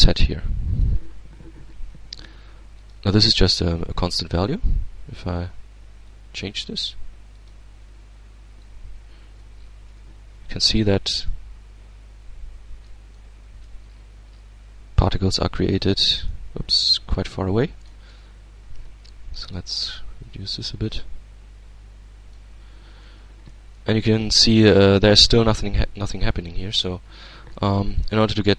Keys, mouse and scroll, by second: 2.4 click, 5.6-6.9 drag, 6.9 click, 8.8 Tab, 9.2-9.6 scroll down 1, 10.1 alt+a, 10.9-13.5 alt+middle drag, 13.5-14.0 scroll down 2, 14.0 scroll down 1, 14.2-14.6 scroll up 2, 14.7-16.2 middle drag, 16.2-16.8 scroll up 1, 16.8 middle click, 17.5-17.9 scroll down 1, 18.3 Tab, 19.0 click, 19.8-22.3 shift+drag, 22.6-24.1 shift+middle drag, 24.1-25.3 drag, 25.5 alt+a, 27.1-28.0 middle drag, 28.3 Tab.